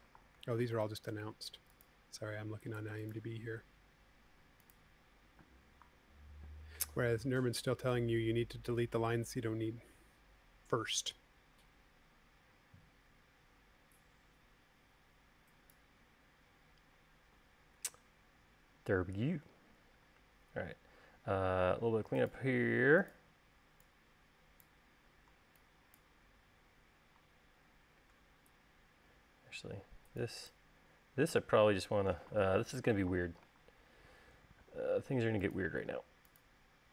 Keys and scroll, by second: 1.1 super+v, 6.0-6.3 typing, 23.8 e, 31.7 l, 35.2 l.